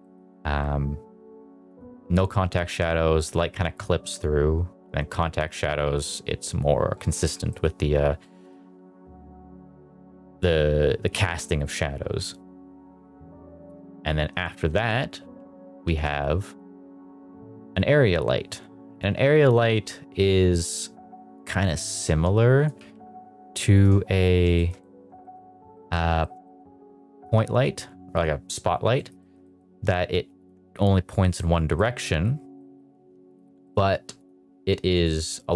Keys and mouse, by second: 1.6 click, 4.8 click, 7.4 middle click, 8.1 middle drag, 15.1 h, 15.7 shift+a, 22.6 click, 22.6 r, 22.7 g, 23.4 click, 23.7 KP_Decimal, 24.5 shift+middle drag, 24.7-25.0 middle drag, 25.1 shift+middle drag, 25.6 middle click, 26.1 middle click, 26.3 shift+middle drag, 27.3 r, 28.0 click, 28.8 middle click, 29.1 shift+middle drag, 29.3 middle drag, 29.6 g, 30.3 click, 31.3 middle click, 31.6 middle drag, 31.9 middle drag, 32.5 middle drag, 32.8 r, 33.2 click, 33.5 middle drag, 33.8 r, 34.1 click, 34.8 click, 35.0 click.